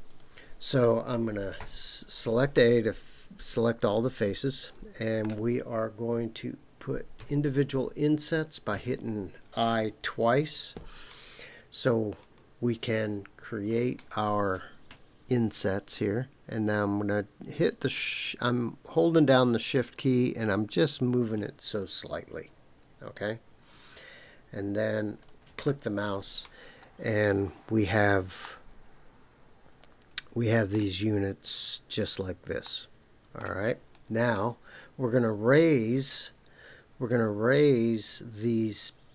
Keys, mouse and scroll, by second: 0.0 click, 1.6 a, 2.5-5.3 middle drag, 7.2 i, 8.7 i, 25.2 click, 26.5 scroll up 3, 28.4-30.9 middle drag, 32.6 middle click, 33.7-34.3 scroll down 3.